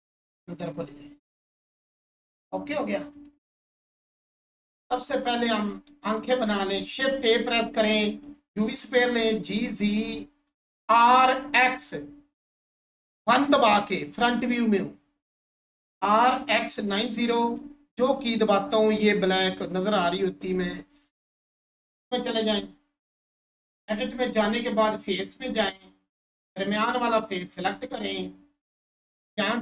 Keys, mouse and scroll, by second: 0.2 click, 0.6 1, 3.1 click, 3.7-4.4 scroll down 1, 5.5 Tab, 5.9-6.4 scroll down 1, 8.2 click, 10.1-12.1 scroll down 1, 16.7 typing, 17.3 click, 18.2 click, 23.4 scroll up 1, 23.8 shift+click.